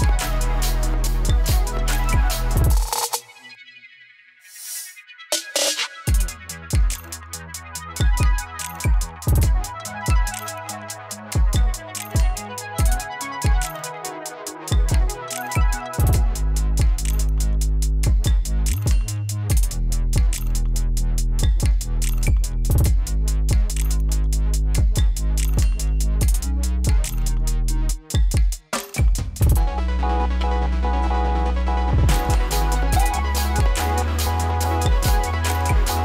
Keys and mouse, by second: 0.1 space, 2.0-4.8 drag, 4.8 space, 6.4 click, 7.7 space, 10.1 click, 14.2 ctrl+d, 14.8-19.6 drag, 21.4 v, 22.5-24.5 drag, 24.9 ctrl+d, 25.7 click, 29.8 p, 30.6-32.9 drag, 33.5 ctrl+d, 34.7-36.0 drag.